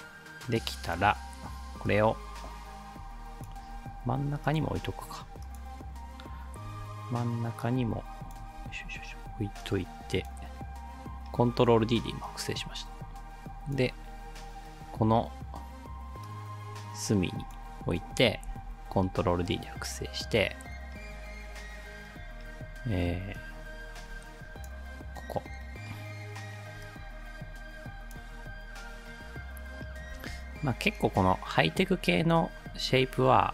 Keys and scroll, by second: 3.7 ctrl+z, 6.7 ctrl+d, 8.6 ctrl+z, 18.5 ctrl+d, 30.1 ctrl+d.